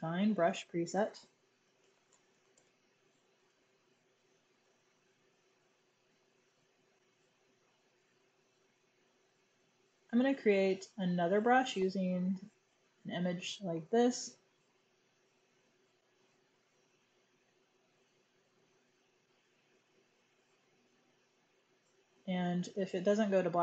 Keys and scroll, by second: 1.3-3.6 typing, 4.6 super+z, 4.8 super+z, 16.3 super+j.